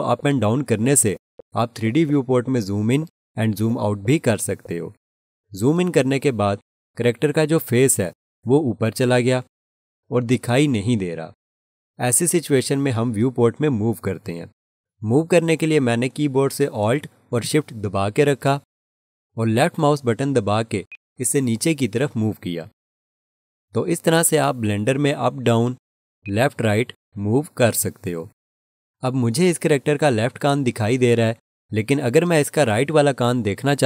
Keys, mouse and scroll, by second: 0.6 scroll down 1, 0.6-0.9 scroll up 1, 0.9 scroll down 1, 1.2 scroll up 1, 1.4 scroll down 1, 1.7 scroll up 1, 2.0 scroll down 1, 2.2-2.8 scroll up 1, 2.8-3.2 scroll down 1, 3.5 scroll up 1, 20.9 alt+shift+click, 26.2 alt+shift+click.